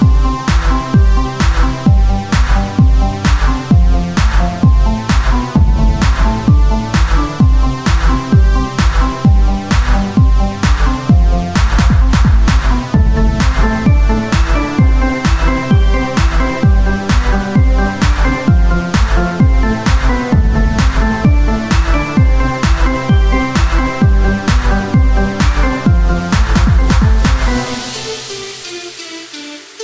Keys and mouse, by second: 1.9-3.6 drag, 2.8 right click, 3.6 z, 6.2 KP_1, 6.6 z, 10.4 z, 11.6 Tab, 15.3 KP_1, 15.6 z, 18.2 z, 19.9-21.0 drag, 20.5 a, 21.6-23.0 drag, 23.0 Tab, 25.3-29.8 drag.